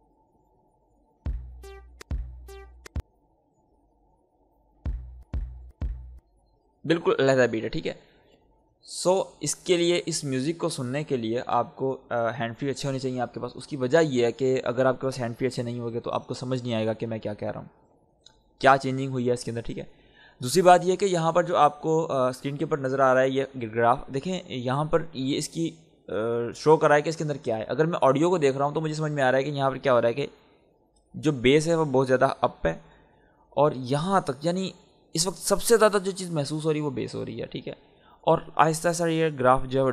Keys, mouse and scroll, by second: 1.1 space, 3.1 click, 4.7 space, 8.4 click, 17.5 scroll down 1.